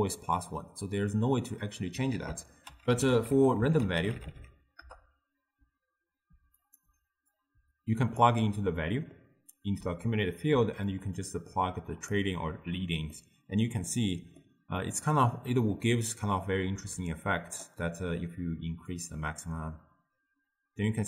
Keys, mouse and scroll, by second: 2.2 ctrl+a, 7.4-8.8 drag, 8.8-11.0 middle drag, 11.0 click, 13.2-15.7 middle drag, 15.7-17.9 drag, 17.9-19.0 middle drag, 19.0-21.0 drag.